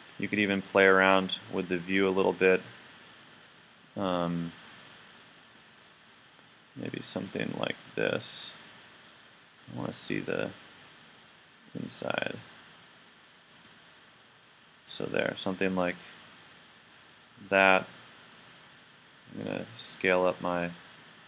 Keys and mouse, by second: 3.8-5.9 middle drag, 13.9-18.3 middle drag, 18.3-20.5 right drag, 19.6 s.